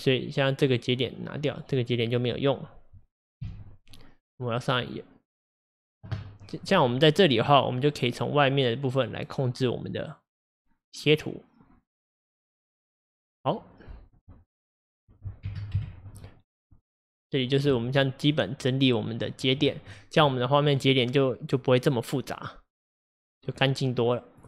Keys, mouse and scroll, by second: 0.4-1.7 drag, 2.3 click, 3.4 x, 7.9-10.8 drag, 15.3-17.8 drag, 22.3-24.4 drag.